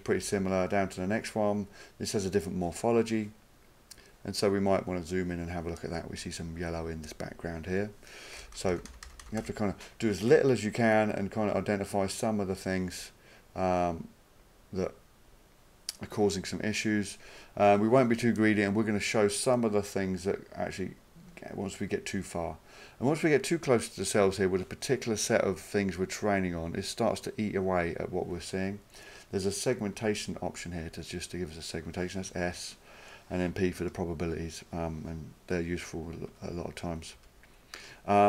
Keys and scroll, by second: 0.2 Page_Down, 11.9 typing, 32.3 s, 33.9 p, 35.3-37.5 typing.